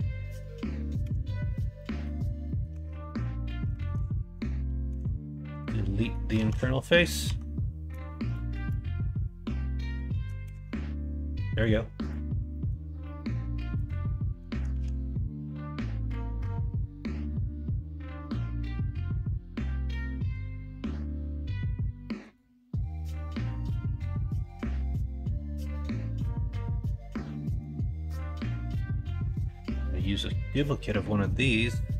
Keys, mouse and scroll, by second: 1.0 ctrl+a, 1.8 middle drag, 2.4 middle click, 2.7 Tab, 3.8 alt+z, 4.8 x, 6.0 middle click, 6.3 alt+z, 6.7 middle click, 7.2 Tab, 10.5 ctrl+KP_Subtract, 11.3 middle drag, 12.5 middle click, 13.0 middle click, 14.0-14.5 middle drag, 14.7 shift+a, 22.9-23.4 middle drag, 24.1 middle drag, 25.9-27.6 middle drag, 28.8 middle click, 29.7 middle click, 30.3 middle drag, 31.0-31.8 middle drag.